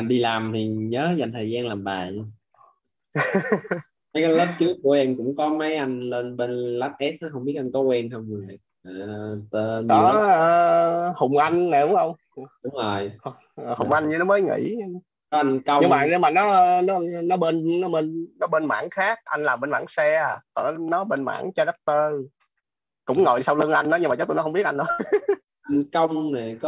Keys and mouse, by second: 8.6 click, 13.2 click, 16.8 click, 19.3 click.